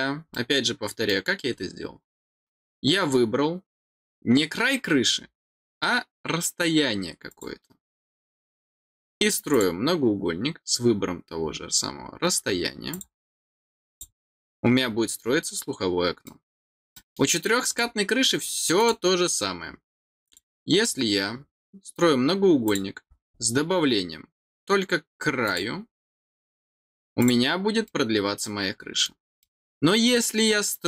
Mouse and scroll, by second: 0.3 middle click, 1.5 scroll down 2, 7.2 click, 9.5 click, 12.9 click, 13.8 click, 14.8-15.3 scroll down 4, 16.2 middle click, 16.9 middle click, 17.6 click, 18.7 click, 20.2 click, 22.6 click, 23.0 middle click, 25.4 click, 26.3 middle click, 27.1 click, 27.8-29.0 middle drag, 29.3 middle click.